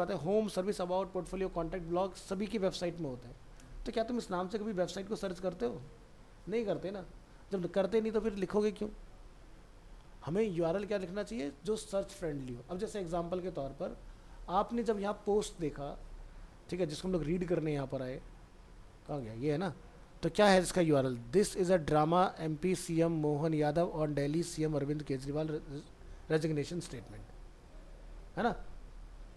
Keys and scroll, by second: 13.6 alt+Tab.